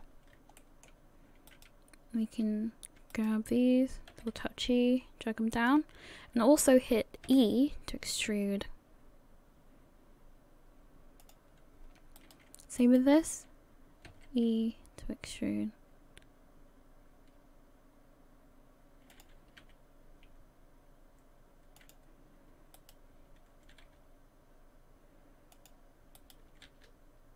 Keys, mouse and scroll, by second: 0.0-0.4 scroll up 1, 0.6 shift+middle click, 1.5 right click, 3.1 shift+right click, 4.1 g, 7.3 e, 12.2 right click, 12.8 shift+right click, 14.1 e, 19.6 s, 22.8 right click, 23.7 g, 26.2 right click, 26.7 g.